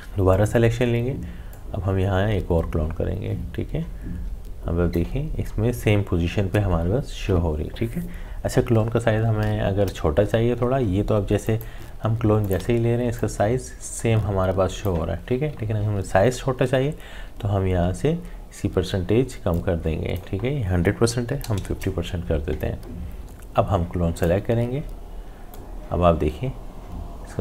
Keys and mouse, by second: 9.9 click, 10.2 ctrl+z, 11.5-16.4 alt+drag, 16.4 ctrl+z, 19.5-22.7 drag, 23.1-27.4 drag.